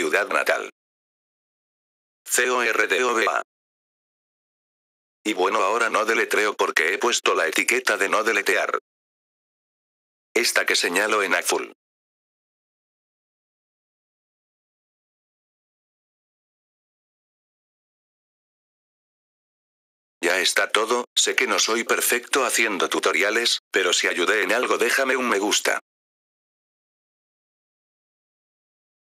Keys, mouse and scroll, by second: 5.1 click, 11.0 click, 12.0 click, 13.0 click, 13.7 right click, 13.9-15.3 drag, 20.1 click.